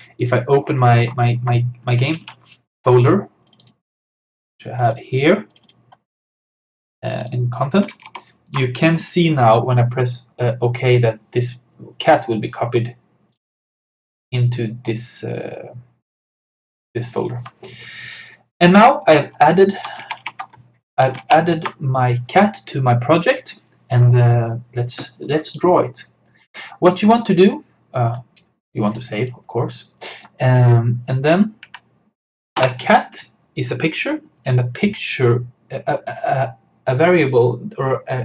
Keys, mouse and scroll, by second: 1.3 alt+click, 2.2 super+d, 3.5 click, 3.8 click, 8.0 alt+Tab, 13.4 click, 16.3 click, 19.1 alt+Num_Lock, 19.2 alt+Tab, 20.4 alt+Tab, 26.9 click, 32.6 Return.